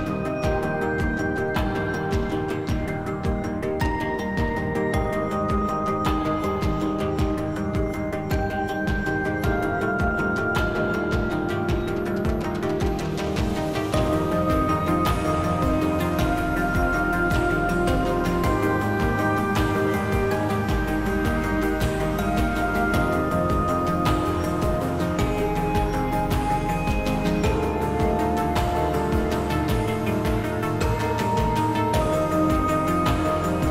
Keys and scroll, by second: 5.1 alt+e.